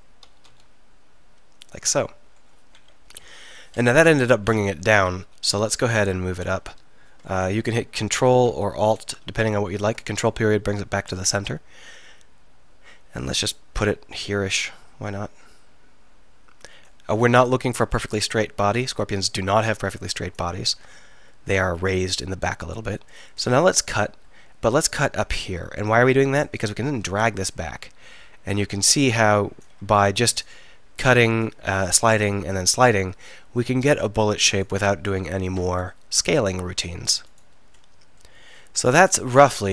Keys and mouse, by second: 0.3 s, 3.1 KP_1, 4.0 KP_3, 7.6 ctrl+., 8.5 alt+., 9.4 ctrl+., 13.3-19.8 middle drag, 21.1 ctrl+r, 29.9 ctrl+r, 36.7 ctrl+r, 37.4 click, 38.2-39.4 right drag, 39.4 click.